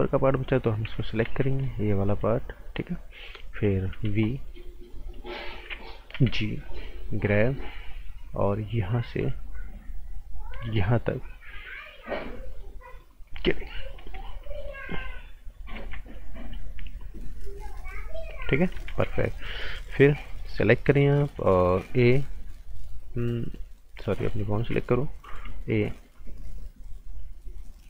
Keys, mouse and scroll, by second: 0.8-1.2 typing, 1.5 click, 3.9 b, 6.6 click, 13.5 right click, 13.9 scroll down 1, 14.0 right click, 14.4 z, 14.8-15.5 scroll down 1, 15.5 click, 15.7 z, 16.1 click, 18.9 ctrl+z, 19.2 right click, 19.6-20.3 scroll up 1, 20.3 click, 21.8 a, 24.0 click, 24.4 right click, 25.2 a, 26.1 click.